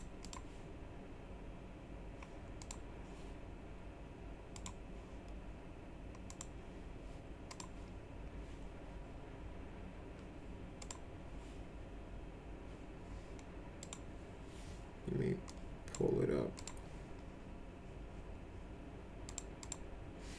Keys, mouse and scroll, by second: 0.2 click, 2.6 click, 4.5 right click, 6.2 click, 7.5 click, 10.8 click, 13.8 click, 15.5 click, 16.6 click, 19.3 click, 19.6 click.